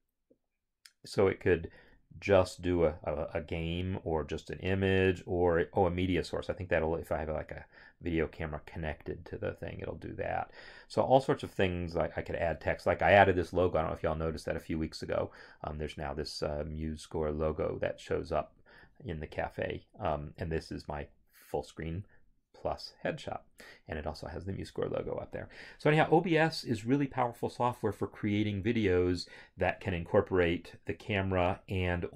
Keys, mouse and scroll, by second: 20.6 click.